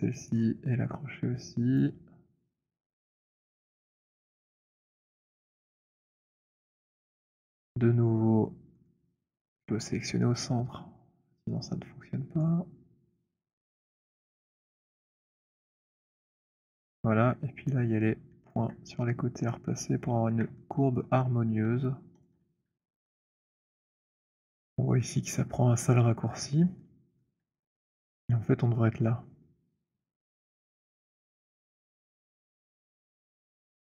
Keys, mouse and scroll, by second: 0.2 click, 0.2 right click, 1.9 click, 4.1 middle click, 4.3 middle click, 5.4-6.6 c, 7.0 middle click, 7.0 c, 7.7 alt+middle click, 8.7 middle click, 9.2 typing, 10.7-15.5 typing, 12.7 middle click, 15.5 middle click, 18.4 alt+click, 19.8 click, 21.1 alt+middle click, 22.3 shift+click, 23.0 w, 23.8 middle click, 24.1 middle click, 25.3 middle click, 25.5 middle click, 25.7 middle click, 26.1 middle click, 26.3 middle click, 27.3 alt+middle click, 27.8 middle click, 29.4-30.3 scroll.